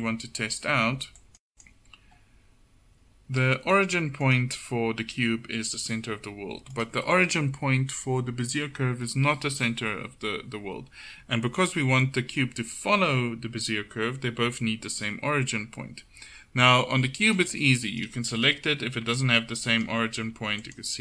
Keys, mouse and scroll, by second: 1.5 ctrl+z, 4.3-20.3 drag, 19.1 g, 20.3 g.